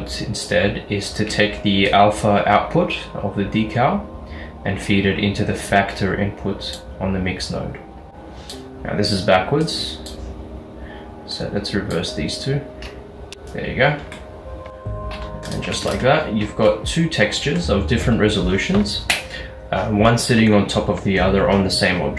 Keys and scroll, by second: 14.7 Tab, 15.7 Tab.